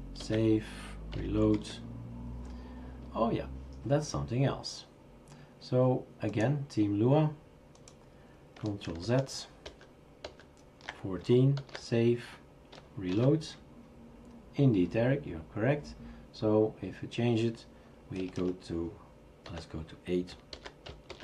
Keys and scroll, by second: 0.2 ctrl+s, 1.6 typing, 9.0 ctrl+z, 9.7 ctrl+z, 10.2 ctrl+z, 11.6 ctrl+s, 13.1 shift+super+r, 13.5 shift+super+r, 18.2 BackSpace, 18.4 BackSpace, 19.5 8, 21.1 shift+super+r.